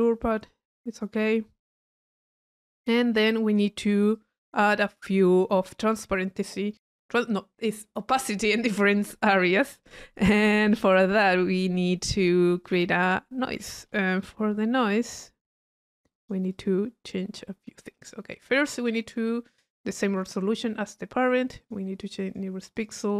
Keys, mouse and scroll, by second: 0.9 click, 1.4 middle click, 2.1 click, 3.0-3.6 drag, 10.2 click, 12.7 click, 15.4 click, 16.2 click, 17.1-18.3 middle drag, 18.3 click, 19.0 click, 20.8 click, 21.6 click, 22.3 click, 22.8 click.